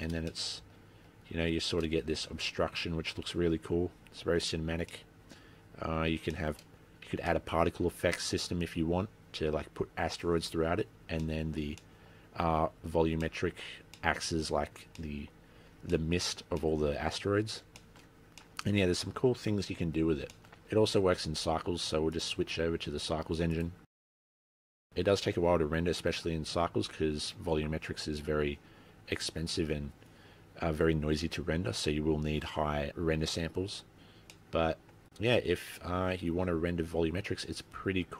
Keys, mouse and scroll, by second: 0.5 shift+middle click, 5.0 middle click, 6.5 shift+middle click, 7.0-7.4 scroll down 5, 7.4 middle click, 11.4 middle click, 12.0 middle click, 12.7-13.4 scroll down 6, 13.4 middle click, 13.9 scroll up 5, 14.1 middle click, 14.6-15.2 scroll up 2, 15.2 middle click, 16.2 shift+middle click, 16.7 middle click, 17.9 shift+middle click, 18.3 scroll down 4, 18.5 middle click, 19.8-20.5 scroll down 2, 20.5 shift+middle click, 21.0-21.4 scroll down 2, 21.3-22.0 scroll up 17, 22.3 click, 34.5 middle click, 37.3 scroll down 3, 37.9-38.1 scroll up 3.